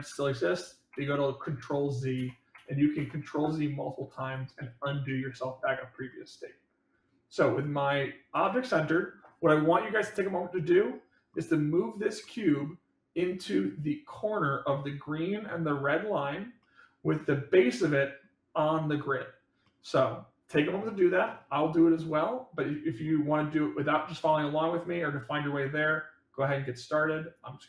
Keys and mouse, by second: 0.8 ctrl+z, 2.1 ctrl+z, 6.0-7.7 middle drag, 8.3 click, 10.1-11.3 middle drag, 12.2-12.5 middle drag, 16.5-17.1 middle drag, 17.7-18.2 middle drag, 19.6-20.1 middle drag, 22.5-23.1 middle drag, 24.4-26.6 drag, 27.3-27.6 drag.